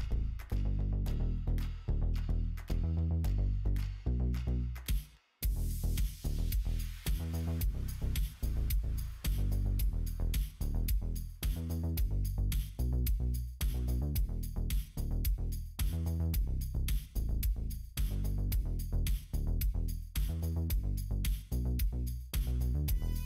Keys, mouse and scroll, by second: 2.7 click, 3.3 right click, 4.0 click, 4.3-8.3 middle drag, 9.1 middle click, 10.2 click, 11.0 h, 11.7 middle click, 14.0 click, 14.4 click, 14.6-16.1 middle drag, 16.7 middle click, 17.1 shift+middle click, 18.1-19.7 middle drag, 20.7-22.9 middle drag.